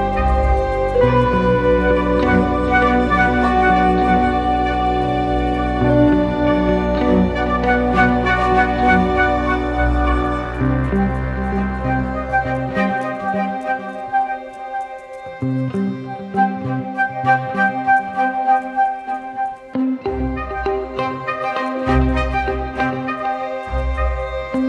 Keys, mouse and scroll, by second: 3.2 ctrl+=, 3.3 ctrl+=, 3.5 ctrl+=, 3.6 ctrl+=, 4.1 space, 11.6 double click, 13.7 ctrl+=, 13.9 ctrl+=, 14.0 ctrl+=, 14.9-16.0 typing.